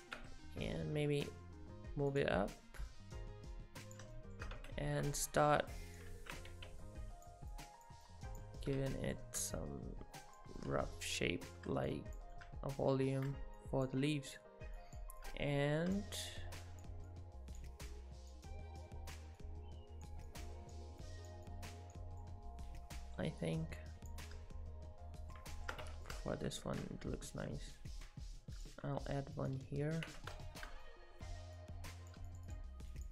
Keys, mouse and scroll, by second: 0.2 Tab, 2.1 click, 2.9 click, 4.2 shift+middle click, 4.5 Tab, 5.4 click, 6.1 ctrl+z, 6.5 g, 6.8 click, 7.5 click, 8.6 middle click, 9.6 click, 10.6 middle click, 11.9 click, 12.4 middle click, 13.6 click, 14.1 click, 15.2 middle click, 16.0 click, 16.6 click, 17.9 click, 20.3 click, 21.0 click, 22.2 middle click, 22.9 middle click, 23.4 click, 24.3 middle click, 25.5 shift+middle click, 25.8 Tab, 26.1 middle click, 26.8 shift+d, 28.9 r, 30.1 Tab, 30.5 shift+middle click, 30.9 middle click, 31.6 click, 32.3 shift+click, 32.5 shift+click.